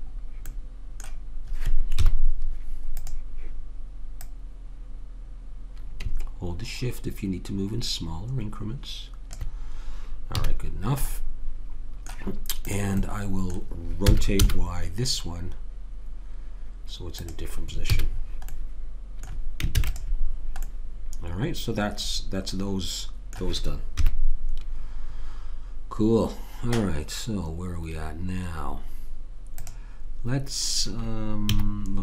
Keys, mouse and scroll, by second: 2.0 KP_3, 3.0-5.5 drag, 5.5 middle click, 5.8 click, 10.4 a, 12.7 click, 14.0 r, 17.9 a, 19.8 ctrl+s, 23.9 KP_3, 29.6 click, 31.4 z.